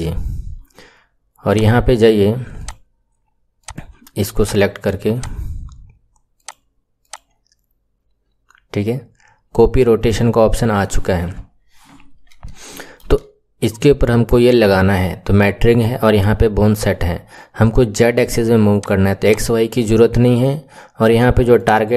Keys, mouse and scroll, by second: 1.4 click, 2.5 click, 3.6 click, 4.3 click, 5.0 click, 6.3 click, 7.0 click, 12.6-15.6 shift+middle drag, 18.8 click, 19.3 click, 21.5-21.9 drag.